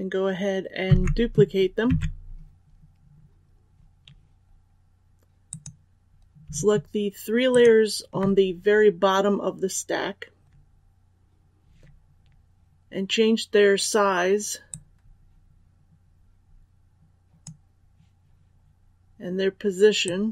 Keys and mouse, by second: 0.8 ctrl+c, 1.8 ctrl+v, 5.4 click, 7.4 shift+click, 14.6-20.3 drag.